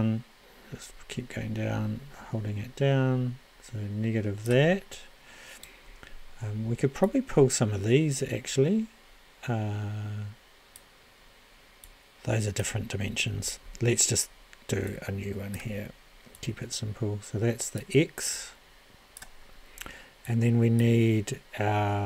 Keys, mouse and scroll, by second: 0.0-1.8 drag, 2.3 click, 3.0 click, 3.4-5.4 drag.